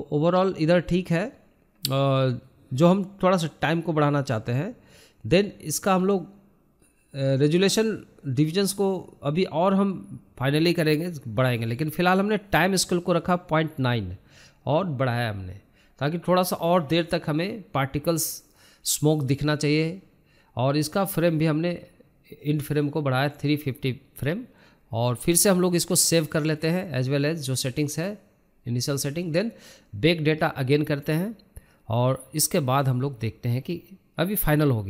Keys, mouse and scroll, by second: 0.7 scroll down 2, 2.2-3.7 drag, 3.7-5.9 scroll up 3, 15.0 scroll down 2, 19.8-26.8 drag, 26.8-28.6 scroll up 15, 28.6-34.2 drag.